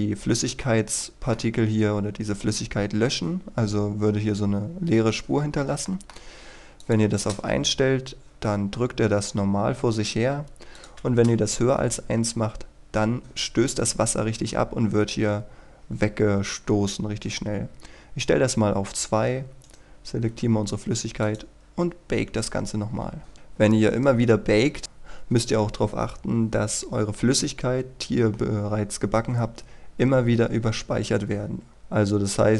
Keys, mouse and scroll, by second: 0.7-1.9 middle drag, 6.8 click, 7.1 KP_1, 7.3 Return, 10.8 click, 11.0 KP_2, 11.4 Return, 19.7 right click, 21.3 click.